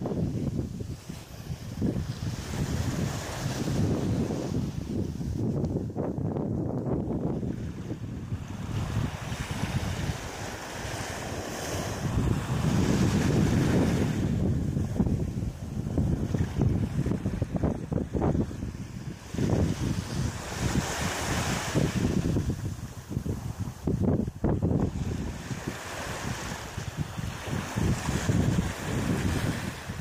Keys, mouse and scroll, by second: 0.0 Page_Down, 1.3 KP_3, 2.5-3.3 shift+scroll down 5, 3.6 shift+middle click, 5.7-6.2 scroll up 6, 6.4 shift+middle click, 7.2-7.6 scroll up 2, 8.0 right click, 9.5 click, 12.0 click, 12.6 right click, 13.1 alt+right click, 14.4-14.9 scroll up 4, 15.2-16.1 scroll down 2, 16.1 scroll down 2, 16.7 click, 18.5 click, 19.3 click, 20.0 right click, 20.9 l, 22.9 click, 24.6 ctrl+z, 26.1 right click, 26.9 middle click, 27.7 right click, 28.1 shift+right click, 28.7 right click, 29.0 right click, 29.4 shift+right click.